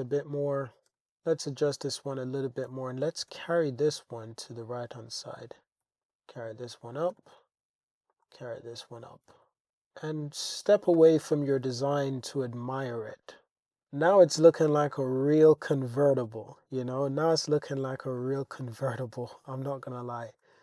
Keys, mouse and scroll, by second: 0.9 g, 1.0 z, 1.6 click, 2.2 click, 3.0 g, 3.3 x, 4.5 click, 5.0 click, 5.8 g, 6.0 click, 6.0 z, 6.4 click, 7.1 g, 7.4 z, 8.1 click, 8.3 Tab, 9.4 alt+z, 9.7-15.5 middle drag, 17.0 middle click, 18.2 shift+drag, 19.5 click.